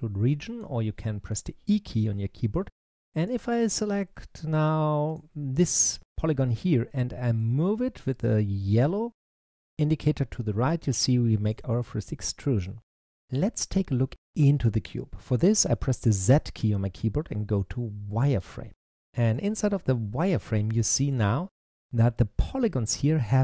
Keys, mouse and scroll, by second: 3.1 click, 4.9 click, 6.1-7.2 middle drag, 7.2 click, 16.1 z, 18.6 middle click, 19.5-20.1 scroll up 2, 20.1-23.1 middle drag.